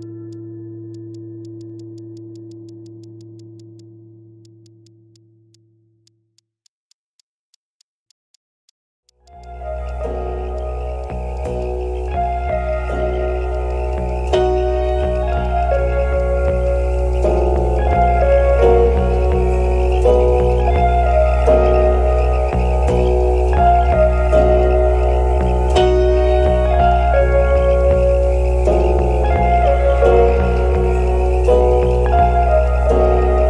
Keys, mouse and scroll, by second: 0.6 alt+middle click, 0.9 Tab, 1.1 Tab, 1.6 Tab, 1.8 Tab, 1.9 Tab, 2.3 Tab, 2.5 Tab, 2.8 Tab, 3.0 Tab, 3.2 Tab, 3.4 Tab, 3.6 Tab, 3.8 Tab, 4.6 Tab, 4.8 Tab, 5.1 alt+click, 5.3 scroll up 1, 5.5 alt+click, 8.3 alt+click, 9.2 shift+click, 10.5 Tab, 11.0 alt+click, 11.3 alt+click, 11.6 alt+click, 11.7 scroll down 1, 12.1 ctrl+s, 12.5-13.1 scroll down 1, 13.5 alt+click, 14.4 scroll up 2, 14.4 alt+middle click, 14.6-15.0 scroll down 1, 15.1 shift+click, 15.4 shift+click, 17.5 shift+click, 17.9 shift+click, 18.0 shift+click, 18.3 shift+click, 18.7-19.1 scroll down 1, 19.2 alt+click, 19.5 alt+middle click, 19.8 alt+click, 20.1 alt+click, 20.7 alt+middle click, 20.8 alt+scroll up 1, 21.0 alt+click, 21.6 Tab, 22.1 Tab, 22.4 Tab, 22.8 Tab, 23.8 Tab, 24.1 Tab, 24.3 Tab, 24.6 Tab, 25.0 Tab, 25.9 Tab, 26.4 Tab, 27.5 Tab, 27.7 Tab, 28.0 Tab, 28.2 Tab, 30.2 Tab, 30.5 Tab, 31.2 Tab, 32.2 scroll down 1, 32.5 alt+click, 32.9 alt+click, 33.3 alt+click.